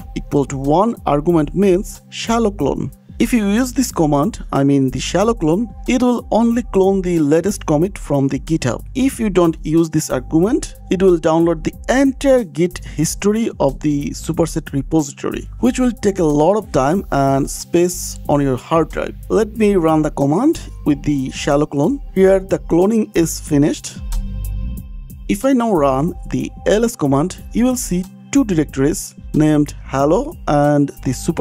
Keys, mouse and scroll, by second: 3.2 click, 4.8 click, 5.5 click, 9.0 click, 13.0 click, 14.8 click, 16.7 click, 17.1 click, 17.5 click, 20.4 click, 21.1 KP_Enter, 21.5 click, 21.6 click, 22.2 click, 22.3 click, 23.1 click, 23.4 click, 23.6 click, 25.1 click, 25.8 click, 27.0-27.9 typing, 30.0 click, 30.7 click.